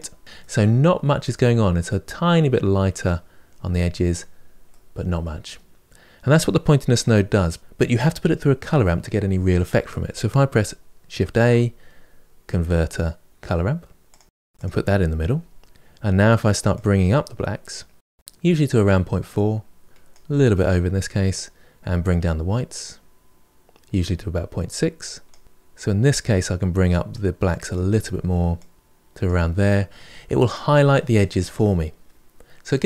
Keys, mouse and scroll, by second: 0.2-3.2 middle drag, 4.5-7.5 middle drag, 7.5 click, 14.0 shift+a, 16.6-18.9 drag, 21.2-24.3 drag, 25.4-27.6 drag, 28.4-32.4 drag, 32.4-32.8 middle drag.